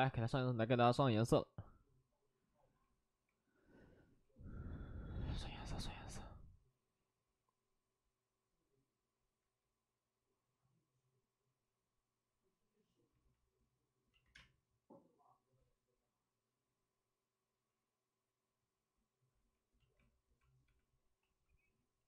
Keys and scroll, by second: 14.3 space, 14.8 space, 20.6 space, 20.6 b, 20.9 p.